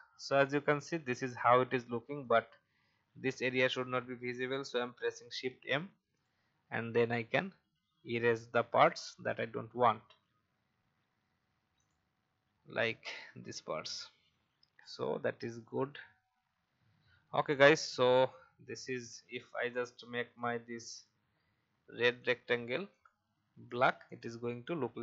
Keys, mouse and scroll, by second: 2.2 shift+click, 4.8 shift+m, 6.1 alt+click, 8.8 alt+click, 11.7 alt+click, 14.8 v, 15.7 click, 16.8-17.2 alt+scroll down 1, 17.5 click, 19.5-20.3 scroll down 1, 20.3 click.